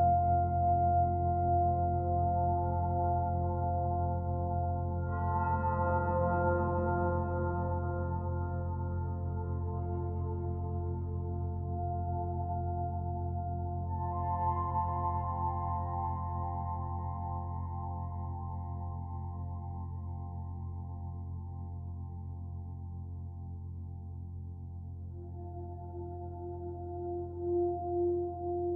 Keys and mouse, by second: 0.2 click, 0.7 click, 1.1 click, 1.6 click, 1.9 click, 3.3 click, 3.7 click, 4.1 click, 4.4 click, 4.8 click, 5.1 click, 5.3 click, 5.7 click, 5.9 click, 6.2 click, 7.4 click, 7.9 click, 8.2 click, 8.5 click, 8.7 click, 9.0 click, 9.3 click, 9.5 click, 9.8 click, 10.0 click, 10.2 click, 10.4 click, 10.7 click, 10.9 click, 11.1 click, 11.3 click, 11.5 click, 11.7 click, 12.0 click, 13.2 click, 13.5 click, 13.7 click, 14.8 click, 15.6 click, 16.5 click, 17.1 click, 18.2 click, 18.9 click, 19.5 click, 20.0 click, 20.5 click, 20.9 click, 21.5 click, 21.9 click, 22.8 click, 24.5 click, 26.2 ctrl+c, 26.5 ctrl+v, 27.7 click.